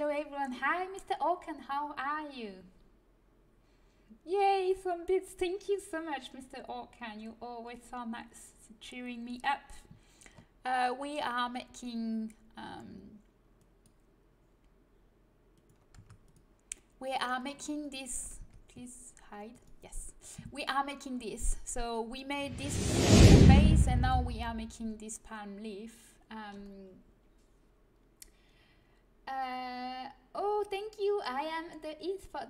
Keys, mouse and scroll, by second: 10.4-13.5 middle drag, 13.5-15.4 drag, 15.9 Tab, 15.9-17.8 drag, 18.3 Tab.